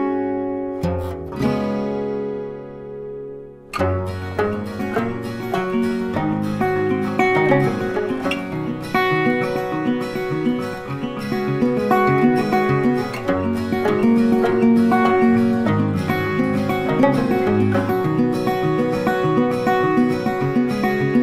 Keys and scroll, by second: 3.6 ctrl+t.